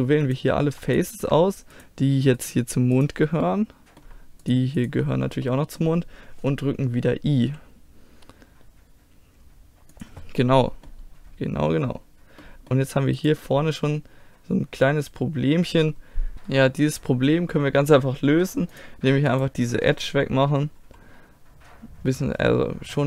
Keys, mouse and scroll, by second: 0.3 right click, 1.1-7.3 middle drag, 7.3 i, 9.9 click, 10.4-13.2 middle drag, 13.2-15.6 right drag, 16.3-18.8 middle drag, 18.8-21.2 drag, 19.3-20.8 right drag, 20.8 x.